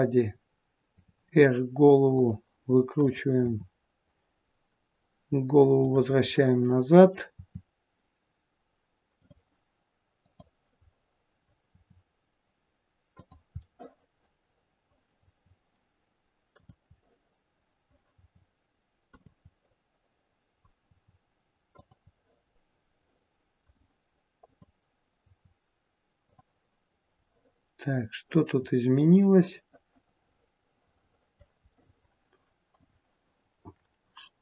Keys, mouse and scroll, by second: 0.8 r, 2.9 click, 3.4 r, 6.2 middle click, 7.3 r, 10.1 click, 10.8 middle click, 11.5 r, 13.5 middle click, 15.2 r, 16.9 middle click, 18.2 r, 19.5 middle click, 20.9 r, 22.1 middle click, 24.5 click, 27.2 middle click, 31.8 middle click, 32.8 click, 33.5-34.4 scroll up 1.